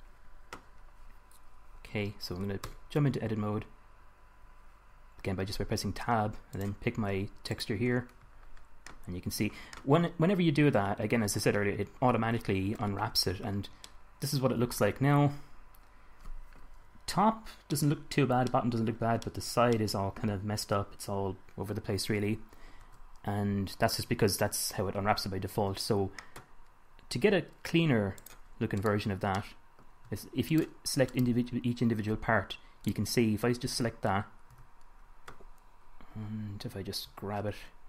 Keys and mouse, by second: 0.8-1.8 drag, 1.8-5.0 middle drag, 2.9 Tab, 6.8-8.8 drag, 9.5 click, 13.7 Tab, 16.5-17.1 middle drag, 22.2-22.9 middle drag, 23.1 Tab, 25.8 KP_1, 29.1-33.2 middle drag, 29.9 click, 29.9 right click, 34.9 a, 36.8-37.4 drag, 37.4 g.